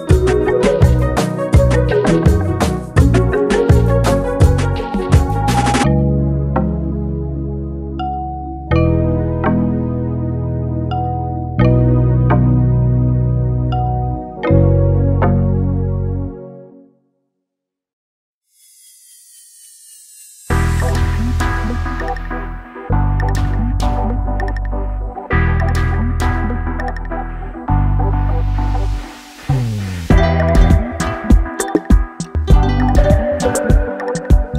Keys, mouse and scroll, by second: 6.6 BackSpace, 9.1 click, 10.4 BackSpace, 12.0-17.3 drag, 21.3 click, 22.5 Up, 29.3 click, 29.7 Down, 31.6 shift+click.